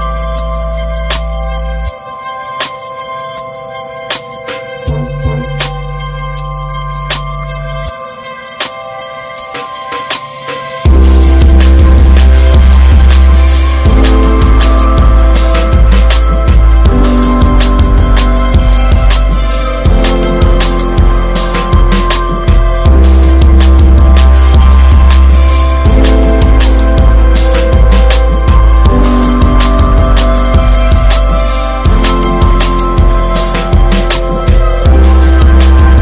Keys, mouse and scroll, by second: 1.7 click, 1.9 scroll down 3, 2.0 middle click, 2.3 ctrl+s, 2.4 click, 2.8 /, 3.2 click, 3.5 scroll down 1, 3.7-4.1 middle drag, 4.1 scroll up 1, 4.2 ctrl+s, 4.4-5.6 shift+middle drag, 5.6-6.2 scroll down 5, 5.8 shift+middle click, 6.2-6.8 middle drag, 6.8 ctrl+s, 7.0 shift+middle click, 7.2 scroll up 3, 7.5 shift+middle click, 7.8 scroll up 1, 8.3 click, 8.8 Tab, 12.1 Tab, 12.4 click, 13.2 ctrl+s, 13.4 click, 13.7 middle click, 14.7-17.0 drag, 18.0-19.4 middle drag, 19.4-20.7 drag, 20.8 scroll down 2, 21.0 ctrl+s, 21.4 shift+middle drag, 21.7 click, 21.8 scroll down 1, 22.0-23.0 middle drag, 23.0 ctrl+s, 23.1 shift+middle click, 23.3 shift+scroll up 1, 23.5-23.9 shift+middle drag, 23.9 scroll up 2, 24.1 click, 24.5 Tab, 24.5 scroll up 2, 24.7 shift+middle click, 25.3 click, 26.3 2, 26.3 click, 26.9 alt+shift+click, 27.6 shift+d, 28.6 p, 29.1 click, 29.5 ctrl+s, 29.8 click, 31.0 click, 31.5 click, 33.1-35.5 drag, 35.9 /.